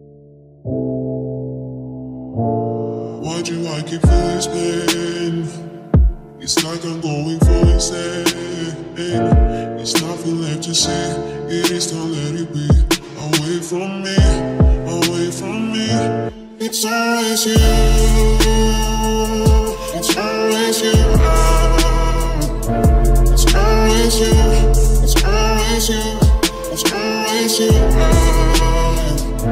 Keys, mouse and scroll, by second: 1.7-3.6 middle drag, 2.6 ctrl+r, 4.6 ctrl+r, 6.8 ctrl+r, 11.2 ctrl+r, 11.9 right click, 12.8-14.6 middle drag, 14.0 ctrl+Tab, 15.0 click, 15.4 c, 18.7-20.1 right drag, 20.1-21.2 middle drag, 20.7 c, 23.1-24.4 drag, 24.1 c, 24.4 middle click, 28.3-29.5 right drag.